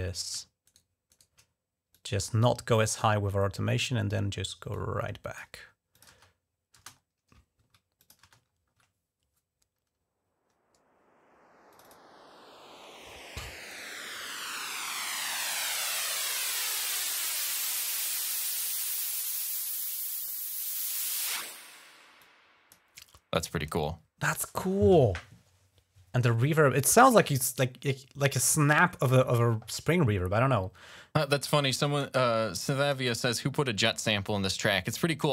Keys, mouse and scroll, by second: 0.5 shift+right click, 0.9 shift+right click, 1.7 click, 4.5 click, 5.7 click, 5.9 space, 6.6 space, 6.8-7.1 ctrl+scroll down 1, 7.8 click, 8.0 space, 8.2 ctrl+scroll up 1, 11.5 click, 13.5 click, 13.9 click, 14.9 click, 16.8 click, 20.0 click, 22.0 click, 31.5 click, 32.6 click, 35.2 click.